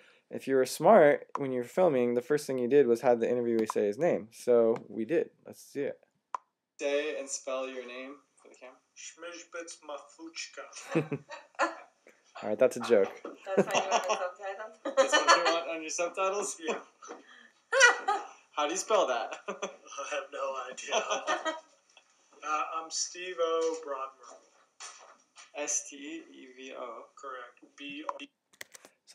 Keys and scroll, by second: 1.0-1.7 typing, 28.5 Tab.